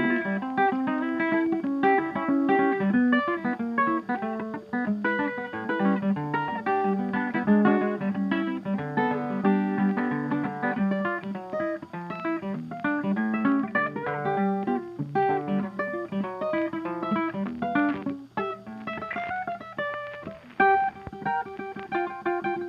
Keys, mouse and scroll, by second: 0.1-1.2 middle drag, 3.5-4.6 middle drag, 5.0-6.1 drag, 7.4-8.6 drag, 9.3-10.4 drag, 10.7-11.7 drag, 12.0-13.1 drag, 13.9-15.0 middle drag, 13.9-14.5 scroll, 14.5-14.9 scroll up 1, 15.1-16.2 drag, 18.0-19.0 drag, 20.7-21.2 scroll.